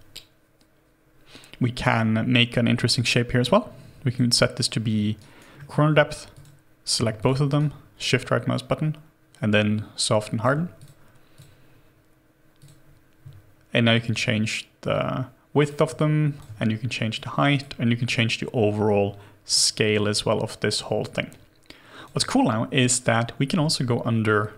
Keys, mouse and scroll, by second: 5.2 alt+right click, 5.6 alt+middle click, 7.2 shift+click, 7.6 shift+right click, 16.0 alt+click.